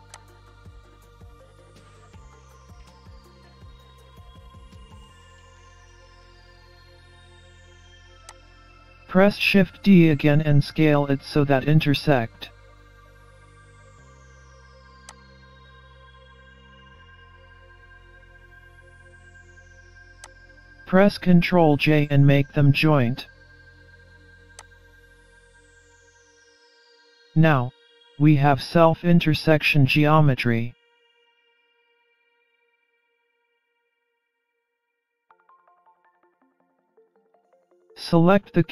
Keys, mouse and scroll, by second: 1.4 shift+d, 3.7 click, 5.4 middle click, 5.4-6.0 scroll down 2, 6.0 scroll up 1, 6.3 middle click, 9.3 s, 13.6 shift+d, 16.1 s, 20.1 s, 24.5-25.0 scroll up 1, 25.0 middle click, 28.2 shift+click, 30.9 ctrl+j, 32.1-32.6 scroll down 3, 32.6-33.1 scroll up 2, 33.1 middle click, 33.1-34.3 scroll up 1, 34.5-34.9 scroll up 2, 34.9 middle click, 35.9 Tab, 36.2-36.7 scroll up 2, 36.7 alt+z, 37.1-37.5 scroll down 3, 37.5 middle click.